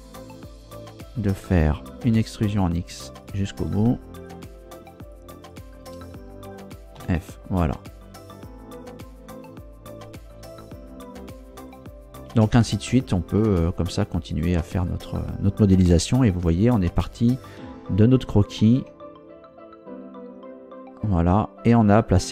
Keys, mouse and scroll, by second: 0.4 right click, 2.1 e, 2.5 x, 3.2 click, 4.1 shift+right click, 5.0 shift+right click, 5.5 shift+right click, 7.0 f, 9.7-10.5 scroll down 6, 10.8 scroll up 2, 11.3 scroll up 2, 12.3 Tab, 13.4 click, 13.6-15.3 middle drag, 15.9 KP_0, 17.1 scroll down 2, 18.8 a, 20.3 z, 20.8-21.4 scroll down 2, 22.1 scroll up 2.